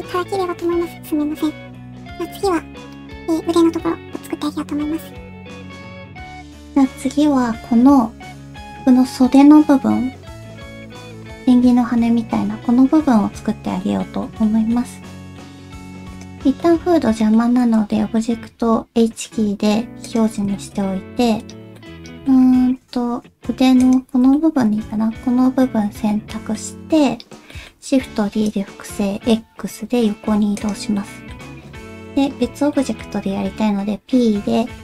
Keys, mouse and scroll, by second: 15.8 middle click, 16.6 middle click, 17.9 middle click, 18.6 h, 19.0 middle click, 20.5 shift+middle click, 21.2 Tab, 21.8 middle click, 24.3-26.5 middle drag, 27.5 shift+middle click, 28.3 shift+d, 30.7 shift+d, 31.1 middle click, 32.9 middle click, 33.9 p.